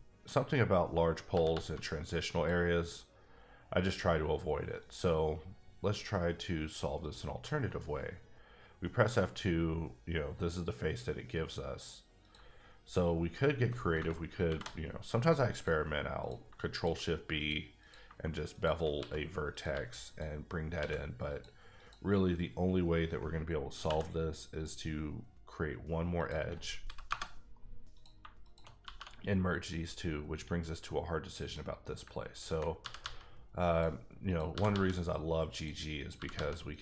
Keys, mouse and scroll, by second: 0.2 click, 1.3 g, 1.5 g, 2.3 click, 4.8 click, 7.0 click, 7.5 f, 12.2 click, 14.4 ctrl+shift+b, 15.5 click, 16.2 click, 16.7 shift+click, 17.8 click, 18.5 shift+click, 19.0 s, 19.5 click, 19.7 g, 20.0 click, 20.8 x, 21.3 click, 21.8 click, 23.8 k, 24.5 click, 26.1 click, 27.1 KP_Enter, 28.1 click, 28.6 shift+click, 28.8 f, 31.4 f, 31.9 click, 32.8 g, 33.0 g, 33.6 click, 34.3 click, 34.5 g, 34.7 g, 35.5 click, 36.0 click, 36.1 g, 36.3 g, 36.7 click.